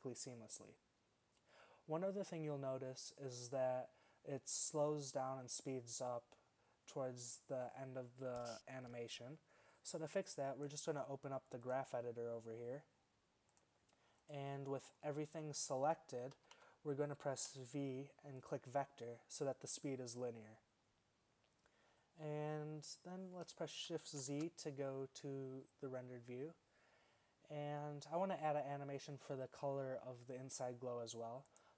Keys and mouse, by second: 14.6 click, 16.0 middle click, 16.4 a, 16.6 a, 17.5 v, 24.5 shift+z, 31.5-31.7 drag.